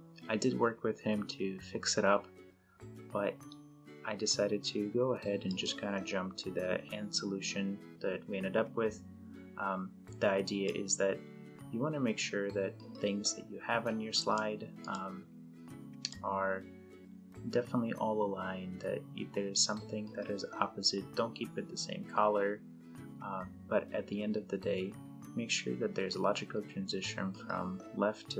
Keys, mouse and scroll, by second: 5.5 click, 10.7-14.5 drag.